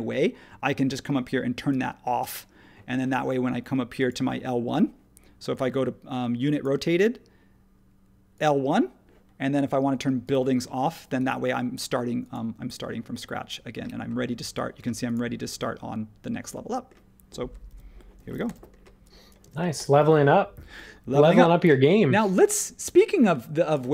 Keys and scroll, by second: 17.7 super+1, 18.5 h, 19.4 space.